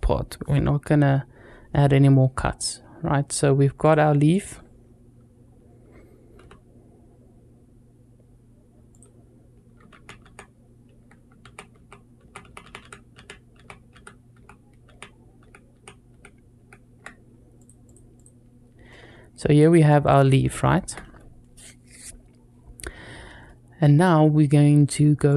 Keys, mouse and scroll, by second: 3.6-4.2 drag, 6.2 x, 9.7 ctrl+z, 10.0 ctrl+z, 11.6 ctrl+z, 12.0 ctrl+z, 12.3 ctrl+z, 12.4 ctrl+z, 12.6 ctrl+z, 13.0 ctrl+z, 13.4 ctrl+z, 13.7 ctrl+z, 14.2 ctrl+z, 14.7 ctrl+z, 15.2 ctrl+z, 15.5 ctrl+z, 15.9 ctrl+z, 16.4 ctrl+z, 17.4-17.7 drag, 18.0 click, 18.7-19.8 middle drag, 20.4-20.7 shift+middle drag, 23.3-23.9 middle drag.